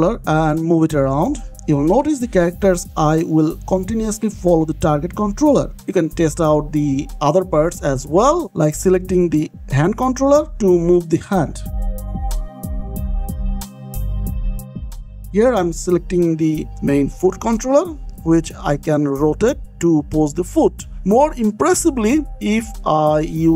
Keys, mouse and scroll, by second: 0.5 g, 5.8 Escape, 7.2 shift+middle click, 8.8 middle click, 10.6 click, 12.4 g, 14.6 Escape, 15.4 middle click, 16.8 middle click, 17.5 click, 17.8 middle click, 18.1 click, 18.4 r, 23.1 Escape.